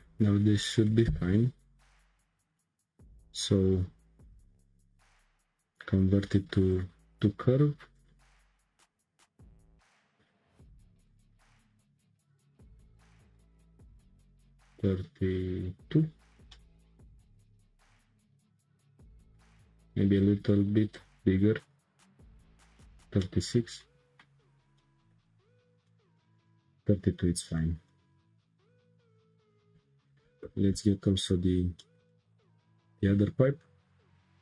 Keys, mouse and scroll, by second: 0.0 click, 0.6-1.1 shift+middle drag, 1.1 Tab, 2.2-5.3 drag, 7.9 click, 8.3-8.8 scroll down 10, 10.0 click, 11.0 click, 11.4-11.9 scroll down 4, 12.2-15.3 drag, 16.5-19.5 middle drag, 20.9-23.2 drag, 23.2-25.9 middle drag, 25.9 scroll down 4, 26.1-27.1 shift+middle drag, 27.1 scroll up 3, 27.6-29.5 shift+middle drag, 29.5 Tab, 30.4 2, 31.1 alt+click, 31.8-33.1 middle drag, 33.1 shift+s, 34.2 Tab.